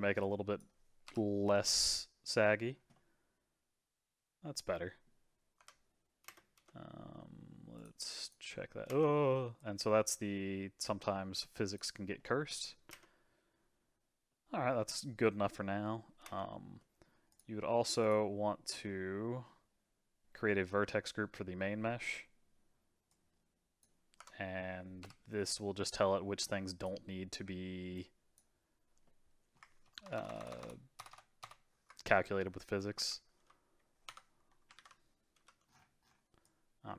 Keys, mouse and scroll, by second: 0.2 click, 1.1 KP_Divide, 1.6 space, 2.6-3.0 scroll down 2, 3.0-5.6 middle drag, 5.6 Tab, 6.2 space, 6.6 space, 7.8-8.9 drag, 8.9 space, 9.6-12.2 drag, 12.2-12.9 middle drag, 12.9 space, 14.3-16.2 middle drag, 16.2 space, 16.8 middle click, 17.3 click, 18.0 click, 23.1-24.2 drag, 24.2 Tab, 25.0 KP_Divide, 25.5-26.8 middle drag, 26.8 click, 27.9 click, 29.0 middle click, 30.0-30.6 ctrl+KP_Add, 31.0 ctrl+KP_Add, 31.1 ctrl+KP_Add, 31.4 ctrl+KP_Add, 32.9 KP_3, 33.3 c, 34.7 alt+z, 35.3 c.